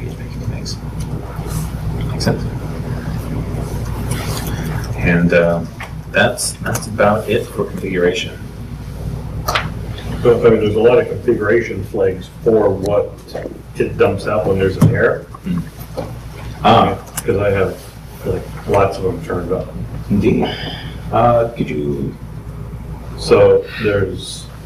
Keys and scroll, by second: 4.2 ctrl+x, 5.4 ctrl+o, 6.6 ctrl+x, 10.2 super+Tab, 20.4 super+Tab.